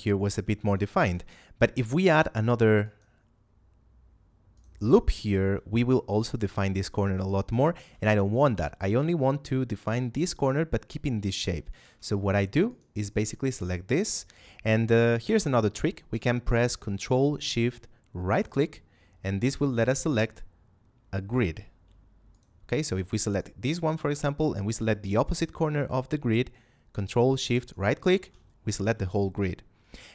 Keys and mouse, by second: 0.5 ctrl+Tab, 1.0 click, 1.8 ctrl+r, 2.7 click, 7.7 ctrl+z, 11.8 ctrl+Tab, 12.2 click, 12.6 right click, 15.1 shift+middle click, 18.2 ctrl+shift+right click, 22.2 right click, 27.6 ctrl+shift+right click.